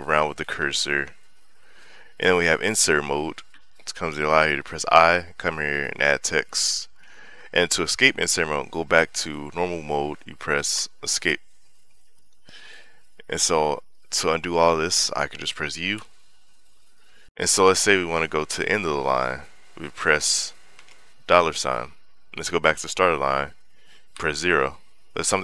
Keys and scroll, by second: 1.3 j, 3.3 i, 5.4-7.0 typing, 10.6 Escape, 16.3 u, 17.3 k, 21.2 shift+4, 24.0 0.